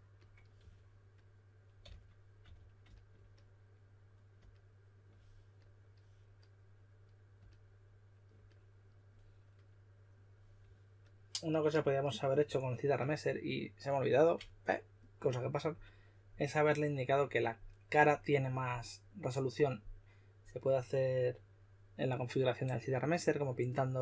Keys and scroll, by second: 0.5 typing, 1.7-2.4 typing.